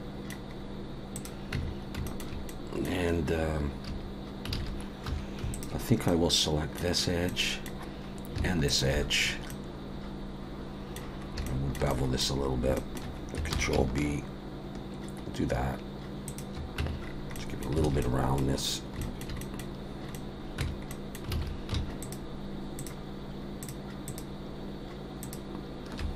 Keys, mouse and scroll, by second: 0.5-1.1 scroll up 1, 1.1 click, 1.1-1.5 scroll up 1, 1.5 Tab, 1.7-2.0 scroll up 3, 2.0 shift+middle click, 2.5 middle click, 3.9 a, 4.5 alt+a, 5.1 2, 5.5 alt+shift+click, 6.1 middle click, 6.9-7.6 scroll down 2, 7.3 middle click, 8.7 alt+shift+click, 9.1-9.5 scroll down 2, 9.5 middle click, 11.2 scroll up 1, 11.4 shift+middle click, 11.9 middle click, 12.4 scroll up 1, 12.7 shift+middle click, 13.5 ctrl+b, 16.8 Tab, 17.0-17.4 scroll down 3, 17.3 middle click, 17.8 alt+a, 18.0 middle click, 19.0 shift+middle click, 19.4 middle click, 20.1 middle click, 20.1 shift+middle click, 20.6 Tab, 20.6 click, 20.6-20.9 scroll up 2, 20.9 middle click, 21.4 alt+a, 22.0 alt+shift+click, 23.2 alt+shift+click, 23.6 alt+shift+click.